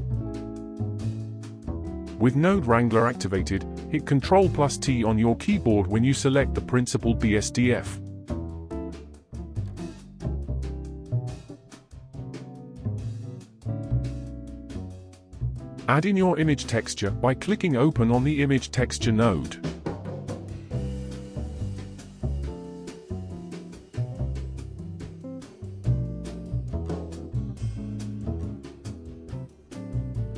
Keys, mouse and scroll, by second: 1.4 n, 2.2-3.3 scroll up 11, 3.3-5.7 middle drag, 5.7 click, 7.3 ctrl+t, 8.9 g, 11.7-13.5 middle drag, 13.5-16.6 drag, 20.6-22.7 scroll up 3, 22.7-24.3 scroll up 4, 24.3-25.8 scroll down 4, 25.8-27.5 scroll down 1, 27.8-30.3 drag.